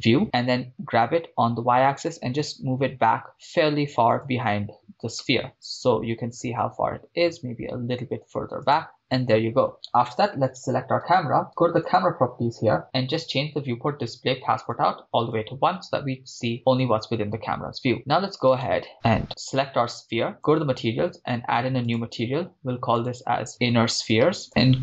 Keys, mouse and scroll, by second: 0.2 click, 0.8 g, 1.1 y, 4.2-5.1 drag, 5.2 KP_0, 5.5-6.6 middle drag, 5.5 scroll down 1, 6.6-6.9 scroll up 1, 7.5 g, 7.7 y, 8.6 click, 9.0 KP_0, 10.5 right click, 11.8 right click, 11.9-12.8 drag, 13.2 click, 13.5-14.7 scroll down 2, 14.7 click, 18.8-20.2 right drag, 20.4-22.4 drag, 23.5-24.5 drag, 23.5 n, 24.2 e, 24.5-24.8 scroll down 3.